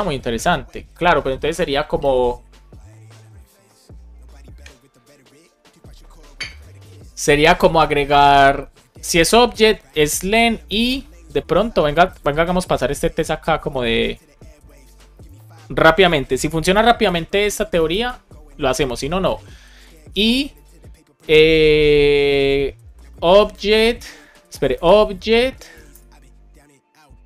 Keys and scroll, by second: 9.2 super+Right, 10.2 Down, 10.6 BackSpace, 10.8 space, 12.9 super+z, 13.9 super+z, 15.8 Left, 16.0 space, 16.5 shift+7, 16.9 space, 17.6 BackSpace, 20.0 shift+7, 20.4 space, 23.0 shift+o, 23.9 BackSpace, 26.8 shift+-.